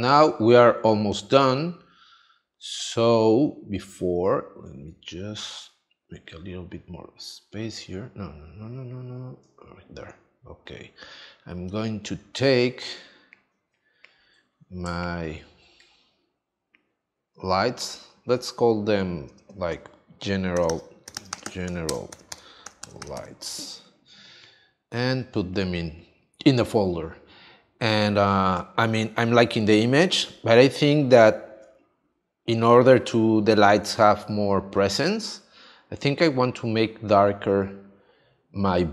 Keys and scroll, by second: 20.5 g, 21.9 space, 22.1 l, 29.1 space.